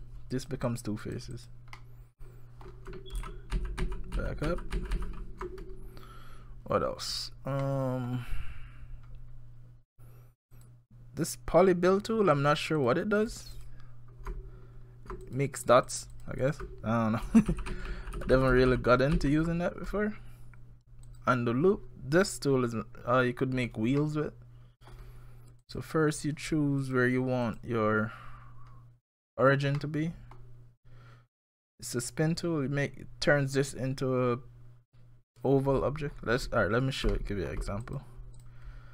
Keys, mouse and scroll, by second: 0.3 click, 0.7 click, 1.0 click, 1.3 click, 1.8 middle click, 3.2 ctrl+z, 3.6-5.0 ctrl+z, 3.6 ctrl+x, 6.6 scroll down 1, 7.6 middle click, 10.5 click, 12.3 click, 12.8 click, 13.2 click, 13.5 click, 15.3 click, 15.6 click, 15.9 click, 16.1 click, 16.4 click, 17.3 ctrl+z, 17.5 ctrl+z, 17.7 ctrl+z, 17.9 ctrl+z, 18.2 ctrl+z, 18.3 ctrl+z, 18.5 ctrl+z, 18.7 ctrl+z, 19.2 ctrl+z, 21.1 click, 24.0 middle click, 25.6 click, 26.8 click, 27.5 click, 29.4-29.8 scroll down 4, 29.8 middle click, 30.4 scroll down 1, 31.5 click, 36.1-36.4 scroll down 4, 36.5-37.1 scroll up 6, 37.1 shift+middle click, 38.0 click, 38.0-38.4 shift+scroll down 1, 38.4 click.